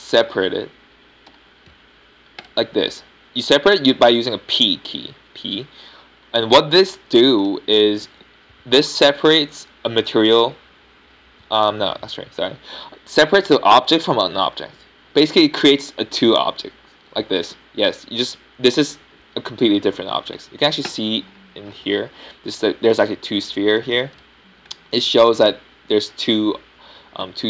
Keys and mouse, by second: 0.7-2.1 middle drag, 3.2 p, 8.1 Tab, 8.5 Tab, 8.9 Tab, 17.4 g, 19.4-20.9 drag, 20.1 g, 21.1-21.7 right drag, 24.4-25.7 middle drag, 25.7-26.6 right drag.